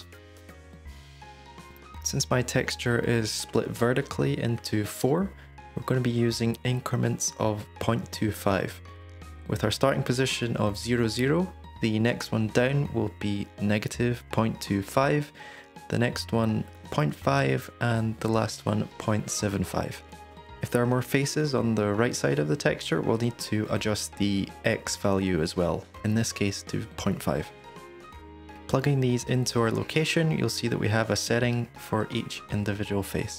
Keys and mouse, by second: 0.7 shift+d, 1.3 shift+d, 2.5 middle click, 2.5 g, 5.3-6.4 drag, 10.7-14.3 drag, 15.8-18.1 drag, 18.6 middle click, 19.4-22.3 drag, 24.0 middle click, 25.3-26.0 drag, 28.0-28.9 drag, 30.1 click, 32.5-33.3 drag.